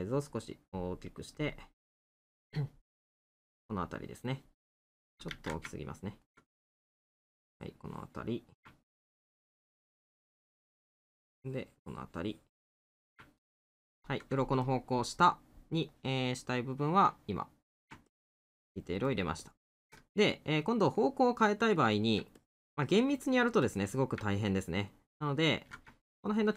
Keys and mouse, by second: 1.9 middle click, 3.3 middle click, 5.7 middle click, 9.0 middle click, 13.4 middle click, 14.7 middle click, 20.9 middle click, 24.4 middle click.